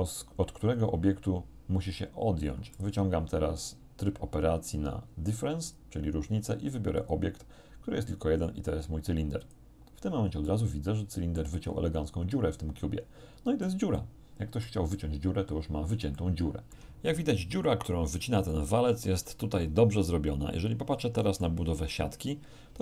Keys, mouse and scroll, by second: 2.8 click, 5.7 click, 7.0 click, 9.5 click, 10.5-11.6 middle drag, 11.6-12.2 scroll up 1, 12.2 scroll up 1, 12.4-13.9 middle drag, 13.9 scroll up 1, 14.0 middle click, 14.9 scroll up 1, 15.0-16.1 middle drag, 16.2 shift+middle click, 18.5 shift+middle click, 19.5-21.7 shift+middle drag, 21.7 z, 22.3-22.8 middle drag.